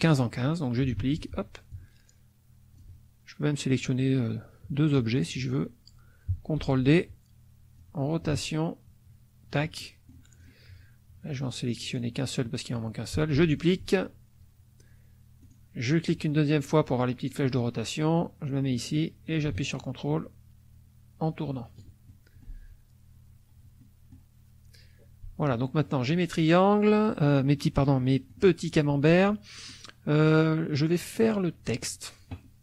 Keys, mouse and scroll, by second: 1.0 ctrl+d, 1.7-2.9 ctrl+drag, 5.2 shift+click, 6.6 ctrl+d, 7.8-9.7 drag, 9.8 ctrl+middle click, 10.4 ctrl+click, 11.8 click, 12.4 middle click, 13.4 ctrl+d, 15.4 click, 18.7-22.1 drag, 22.1 ctrl+middle click, 23.8 middle click, 27.9 middle click, 29.3 middle click.